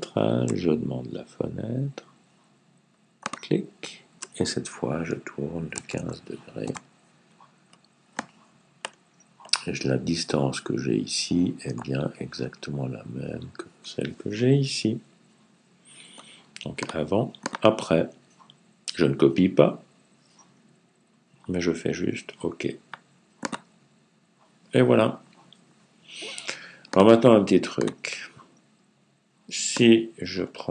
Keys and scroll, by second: 5.6 typing.